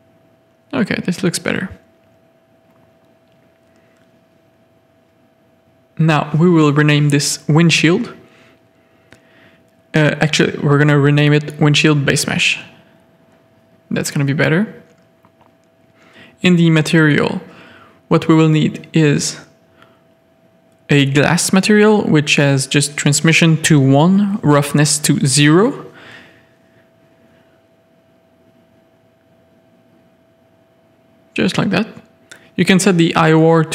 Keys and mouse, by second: 0.8-1.1 middle drag, 1.2 z, 1.5-2.2 middle drag, 2.7 click, 3.0 shift+middle click, 13.9 middle click, 15.8 click, 16.3-16.7 shift+middle drag, 17.5 middle click, 17.8-18.2 shift+middle drag, 18.4 middle drag, 20.2 click, 21.0 click, 21.4-27.2 drag, 26.2 s, 29.5 click, 30.5 click, 32.1 middle click.